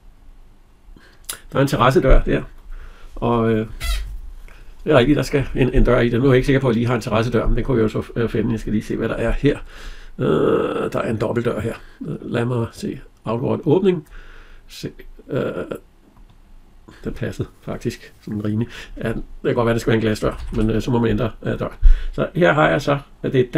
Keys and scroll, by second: 19.9 Escape.